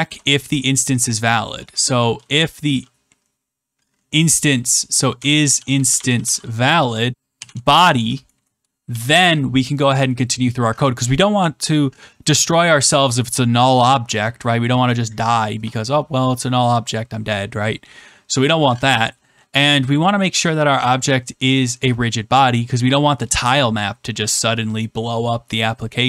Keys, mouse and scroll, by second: 2.6 typing, 4.9-8.8 typing, 9.0 Return.